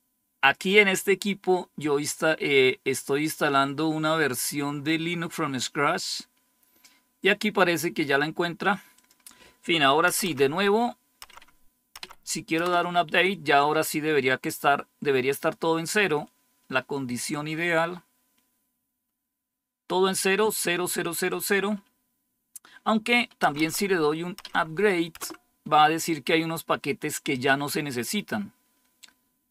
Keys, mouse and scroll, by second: 4.8-7.7 drag, 8.8 click, 10.0 Up, 10.2 Up, 11.1 Up, 11.9 Up, 12.5 Return, 23.4 Up, 23.5 Up, 24.3 Up, 25.1 typing.